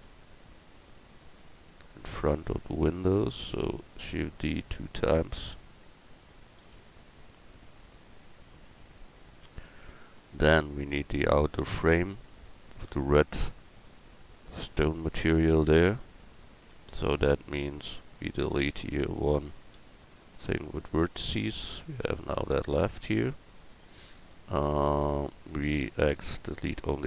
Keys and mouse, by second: 2.6-3.7 middle drag, 3.7 shift+d, 6.6 shift+d, 7.1-9.2 drag, 9.8-15.5 drag, 15.5 middle click, 16.3 right click, 16.6 Tab, 18.3-19.7 drag, 19.7 x, 19.9 click, 23.6 click, 26.0 x.